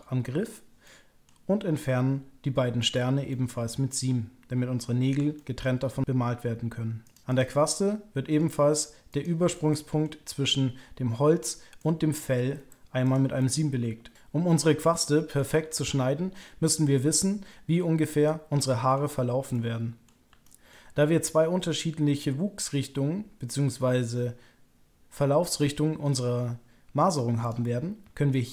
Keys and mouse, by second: 0.8 middle click, 3.3-5.1 middle drag, 5.3 shift+middle click, 7.0 click, 7.6 middle click, 9.6 middle click, 11.7 middle click, 13.3-18.9 middle drag, 19.5 middle click, 20.4 shift+middle click, 28.3 middle click.